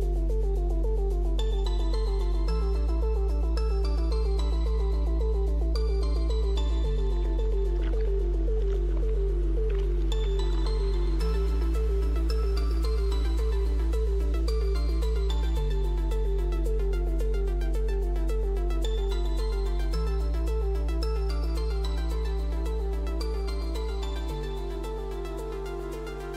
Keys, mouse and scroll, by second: 1.9 click, 3.5 click, 5.7 click, 8.8 Delete, 8.8 click, 10.4 right click, 12.2 click, 12.6 click, 12.8 Return, 12.8 Delete, 12.8 typing, 13.8 click, 15.1-18.3 typing, 18.8 click, 20.5 click.